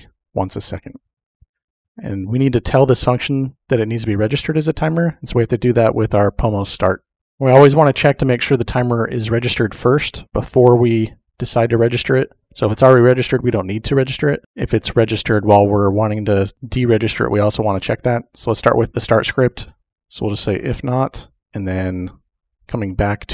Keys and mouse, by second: 20.1-21.4 typing.